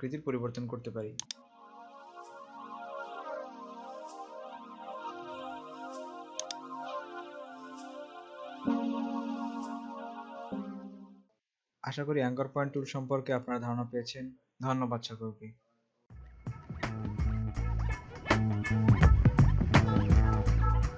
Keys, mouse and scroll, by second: 1.4 click, 6.5 click, 9.0 ctrl+z, 9.2 typing, 10.9 scroll down 1.